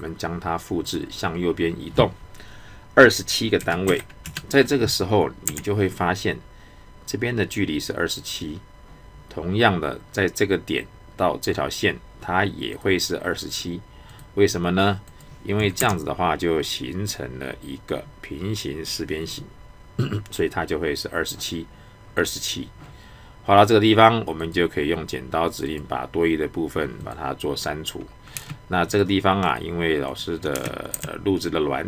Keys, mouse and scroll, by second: 12.7 click, 24.4 click, 28.3 space, 28.9 click, 30.5 space.